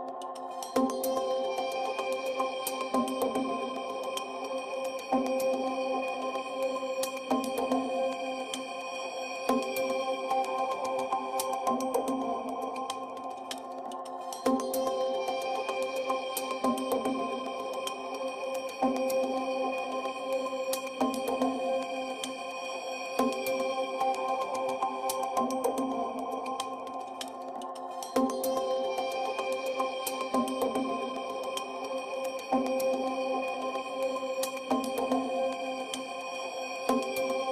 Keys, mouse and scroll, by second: 1.7 shift+c, 2.8 shift+a, 7.6 s, 8.9 shift+z, 10.7 click, 11.4 KP_Decimal, 15.2 s, 15.6 z, 17.7 click, 19.4 g, 20.1 z, 22.4 KP_1, 23.6 KP_Enter, 24.1 g, 24.4 z, 24.9 KP_1, 25.4 KP_Enter, 26.5 KP_Decimal, 27.9 shift+c, 28.7 shift+a, 30.9 Tab, 30.9 a, 31.3 s.